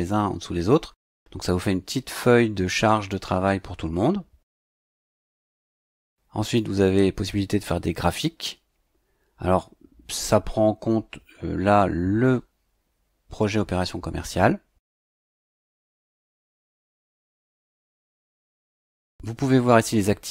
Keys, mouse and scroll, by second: 6.4 click, 15.5 click, 18.3 click.